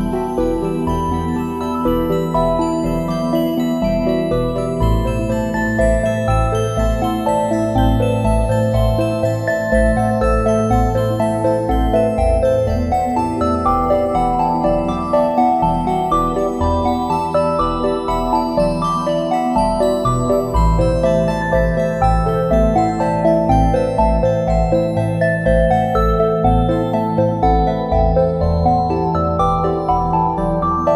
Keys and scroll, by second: 3.1 space, 6.3 space, 7.4 space, 11.5 a, 13.7 space, 15.5 space, 20.8 space, 22.6 space, 23.7 `, 27.8 space, 29.5 space.